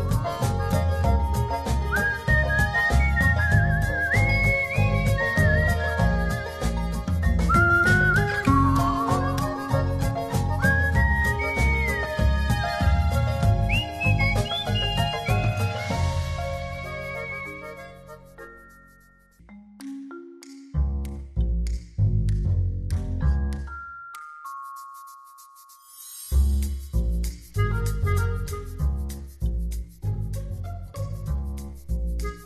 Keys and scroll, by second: 0.8 alt+[, 17.3 z, 21.0 alt+s, 21.5-22.4 typing, 22.8 alt+[, 31.7 super+-.